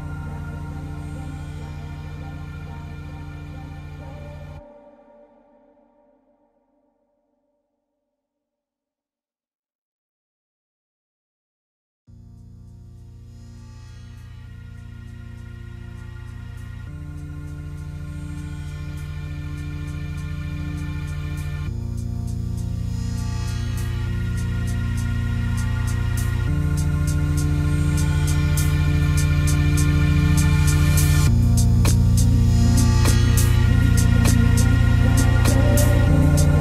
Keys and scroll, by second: 5.2 ctrl+z, 12.6 ctrl+d, 12.9 ctrl+space, 15.5 ctrl+z, 16.4 ctrl+z, 27.6 ctrl+z.